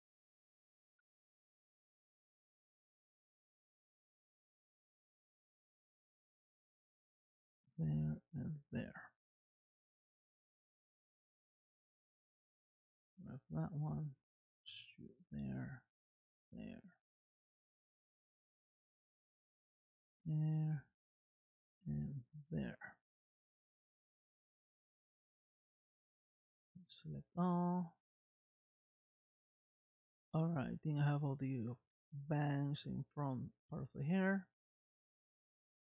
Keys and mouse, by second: 0.7 middle click, 2.1-3.4 middle drag, 3.9 e, 7.9 e, 9.3 middle click, 12.2 click, 14.4 e, 15.6 e, 16.4 middle click, 18.1 e, 18.9-20.0 middle drag, 20.6 e, 21.7-22.9 middle drag, 23.7-25.4 middle drag, 26.8 a, 27.6-34.0 middle drag, 34.7 middle click, 35.8 click.